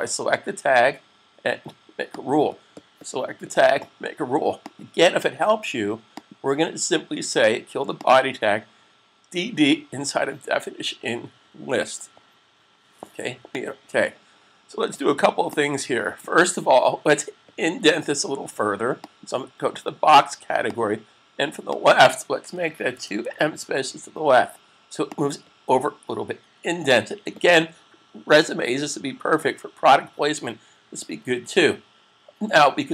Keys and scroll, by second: 22.6-24.0 typing.